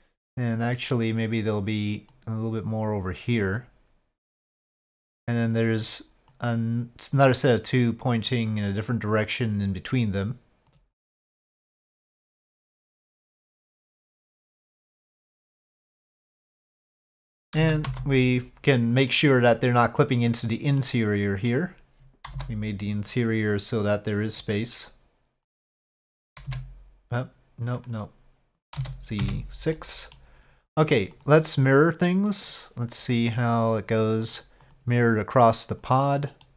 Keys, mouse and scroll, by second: 0.6 click, 2.1-3.5 drag, 4.3-10.8 drag, 11.1-11.5 middle drag, 11.9-12.5 middle drag, 13.4-15.2 drag, 15.6 middle drag, 16.3-16.8 middle drag, 17.6 z, 18.3-19.2 middle drag, 20.8-21.6 middle drag, 22.3 z, 26.4 x, 27.7 click, 28.7 z, 29.8-30.2 drag, 31.1-32.4 drag, 33.7 click, 34.2 click, 34.6-35.8 drag, 36.4-36.5 middle drag.